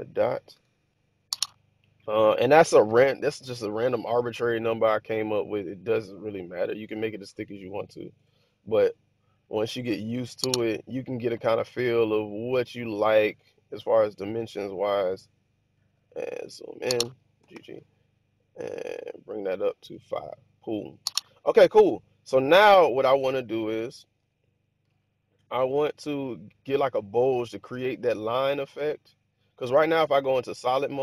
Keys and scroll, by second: 8.0 ctrl+r, 17.2 g, 17.4 g, 24.1 1, 29.8 z.